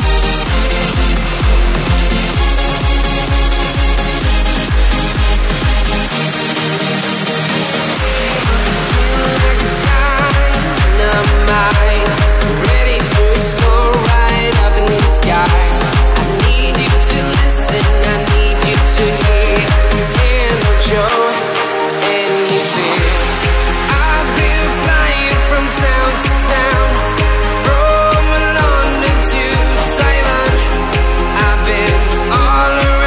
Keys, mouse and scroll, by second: 1.9-2.7 alt+scroll up 3, 3.5 click, 4.8 Down, 6.2 click, 6.3 Down, 7.3 Up, 8.5 click, 15.1 alt+shift+click, 16.1-16.7 alt+scroll up 2, 16.9 click, 19.7 click, 20.5-21.0 alt+scroll down 2, 21.0 space, 21.0 click, 22.5 click, 23.6 click, 24.0 space, 25.0 click, 26.0 click, 26.3 alt+scroll up 1, 26.4 click, 26.9 click, 27.1 alt+scroll down 1, 27.3 space, 27.3 click, 27.4 space, 27.5-28.2 alt+scroll up 5, 27.9 space, 28.2 click, 30.4 space, 30.4 click, 30.5 space, 30.9 click, 32.1 alt+click.